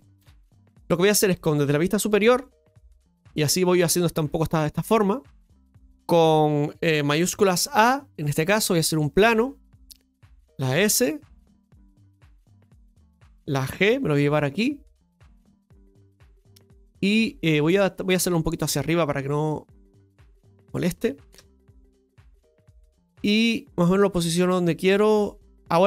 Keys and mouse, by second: 12.1 s, 18.1-18.6 middle drag, 19.6-20.6 drag, 21.3 KP_7, 22.6-23.1 shift+middle drag, 23.9 click, 25.5 Tab, 25.7 right click.